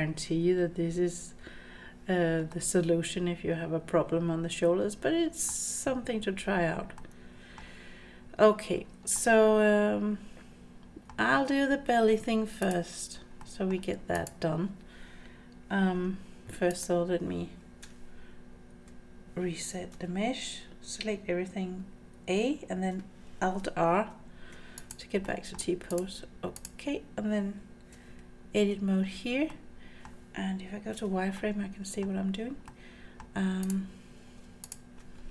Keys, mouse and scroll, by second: 2.5-5.5 middle drag, 7.0 middle click, 9.1-11.1 middle drag, 12.6 click, 13.4 middle click, 14.1 click, 16.7 click, 17.8 Tab, 24.8 click, 25.2-25.6 middle drag, 25.7 scroll down 1, 25.9 click, 26.6 click, 27.9 Tab, 29.1-29.5 scroll up 3, 29.5 middle click, 30.9 z, 31.4 middle click, 32.7 middle click, 32.7 scroll up 1, 33.6 click, 34.6 shift+click.